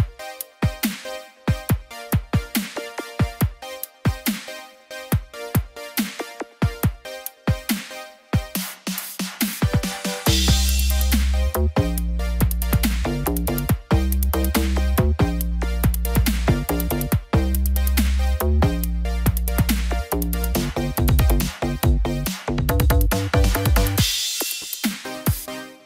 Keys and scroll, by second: 14.7 ctrl+0.